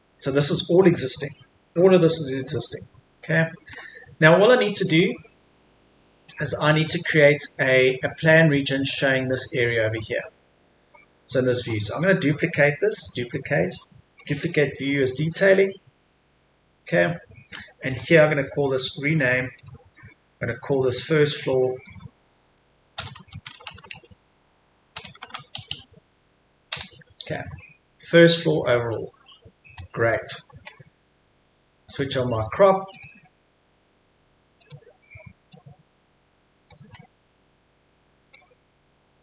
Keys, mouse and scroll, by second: 0.2 Escape, 0.6 middle click, 1.1-1.7 scroll up 1, 1.7-2.1 scroll down 1, 2.1 middle click, 2.8 scroll up 1, 3.3 middle click, 3.8-4.7 scroll down 1, 4.7 click, 5.1-5.5 scroll up 1, 6.0-6.4 scroll down 1, 6.4 middle click, 6.8-9.0 scroll down 1, 9.6-10.2 scroll up 1, 10.2-10.9 scroll down 1, 10.9-12.1 middle drag, 13.0 right click, 14.2 click, 17.9 right click, 19.6 click, 23.0 typing, 26.7 Return, 28.2 click, 28.6-29.0 scroll up 1, 29.0 middle click, 29.8-30.2 scroll up 1, 30.2 middle click, 30.5 scroll up 1, 30.6-31.9 scroll down 1, 31.9 click, 33.6-34.6 scroll down 1, 34.6 click, 36.8-37.2 scroll up 1, 38.3-39.2 drag.